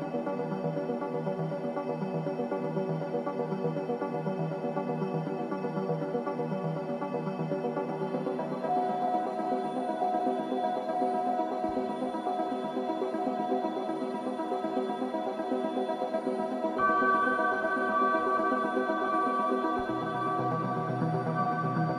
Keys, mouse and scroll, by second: 0.9-4.6 ctrl+drag, 4.6 ctrl+Delete, 8.6 click, 9.1 right click, 10.4 ctrl+Delete, 11.9 click, 13.5 ctrl+Delete, 14.5 click, 15.4 ctrl+Delete, 16.5 click, 17.3 ctrl+Delete, 18.3 click, 19.4 ctrl+Delete, 20.4 click, 21.2 ctrl+Delete.